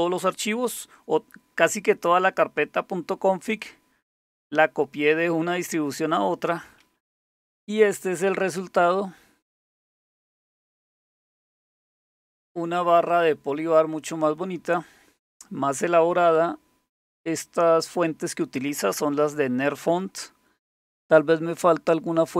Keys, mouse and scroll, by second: 9.6 click, 10.4 click.